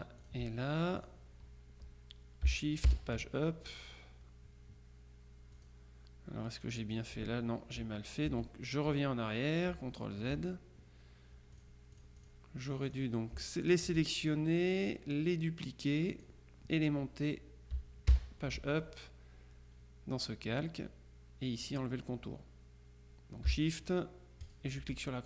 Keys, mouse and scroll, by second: 0.3 shift+click, 1.1 click, 3.0 shift+Page_Up, 5.6 click, 6.9 click, 8.4 ctrl+z, 9.8 z, 11.6-12.9 drag, 13.0 click, 13.7 shift+click, 16.2 click, 18.2 shift+Page_Up, 24.5 shift+click.